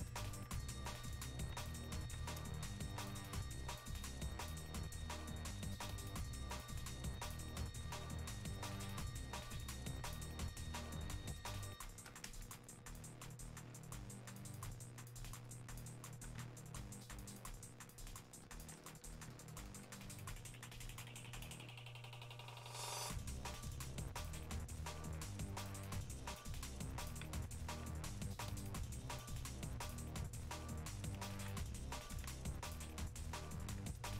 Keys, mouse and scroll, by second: 5.2-10.8 ctrl+drag, 10.8 ctrl+space, 12.6 click, 14.4-31.4 ctrl+drag, 32.5-34.1 ctrl+drag.